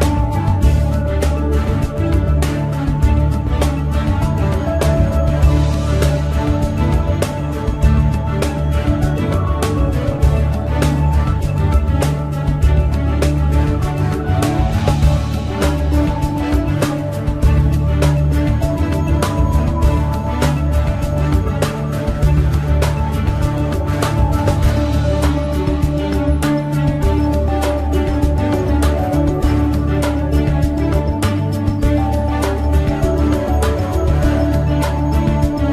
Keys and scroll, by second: 27.7 ctrl+d.